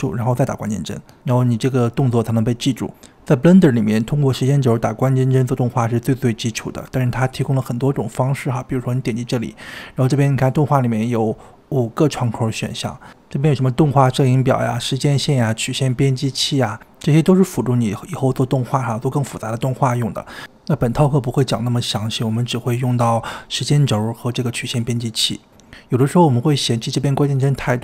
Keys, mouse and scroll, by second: 5.5 click, 8.7-12.0 drag, 24.3-25.4 middle drag, 25.4-25.8 scroll down 2, 27.3 click.